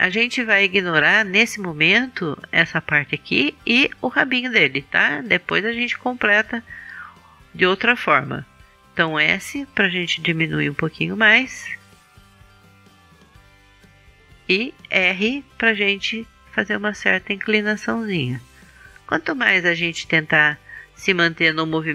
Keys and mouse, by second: 9.4 s, 14.6-15.8 drag, 15.8 r, 15.9-18.4 middle drag, 18.4 click, 20.3 middle click, 20.8 click.